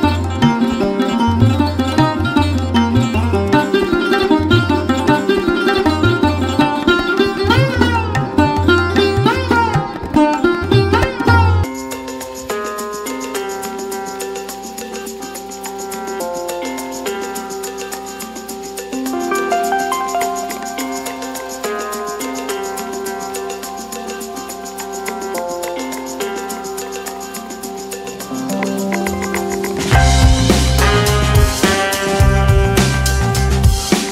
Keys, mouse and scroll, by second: 2.8 click, 6.2 click, 8.2 Right, 10.8 typing, 11.9-16.4 typing, 18.1 click, 20.1 click, 21.1 typing, 21.9 scroll up 1, 22.3-24.0 middle drag, 26.4 middle click, 26.5 typing, 27.6-30.1 drag, 32.9 F12.